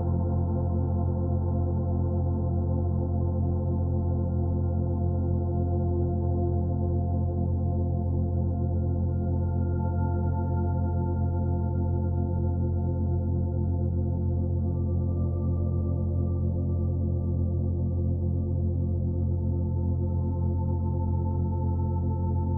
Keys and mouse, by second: 0.2-1.0 typing, 7.8-8.9 drag, 9.6 click, 10.9 click, 12.0 Delete, 13.4 click, 14.5-18.6 drag, 19.4 click, 20.3 shift+d, 21.7 shift+click.